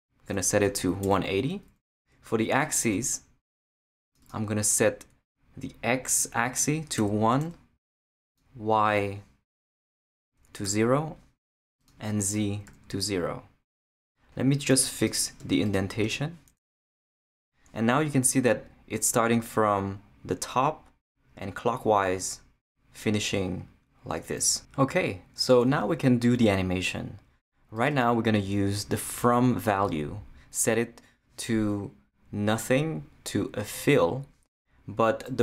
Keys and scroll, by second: 0.7 |, 1.0 8, 2.0 Tab, 2.8 Return, 7.0 |, 10.6 0, 12.7 0, 15.4 Tab.